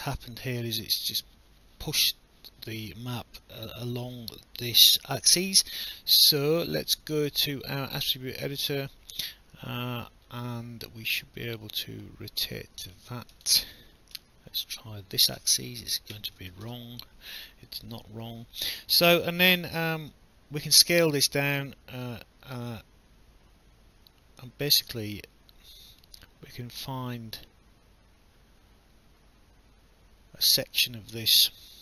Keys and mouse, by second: 7.6 click, 12.4 click, 13.6 BackSpace, 14.1 9, 14.7 Insert, 15.2-16.8 typing, 20.1 click.